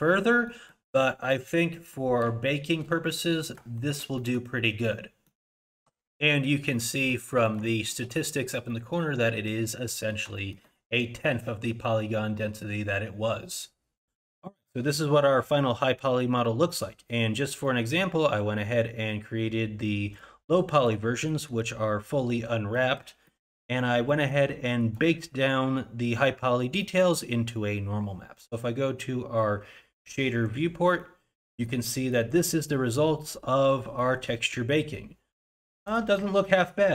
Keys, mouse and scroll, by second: 0.5 middle click, 1.0 middle click, 1.7 middle click, 3.1 middle click, 3.8 shift+middle click, 4.2 middle click, 4.6-5.3 scroll down 3, 5.3 middle click, 5.7 shift+z, 6.7 middle click, 7.3 middle click, 7.7 shift+middle click, 8.7 middle click, 9.4 middle click, 9.9 middle click, 10.4 shift+middle click.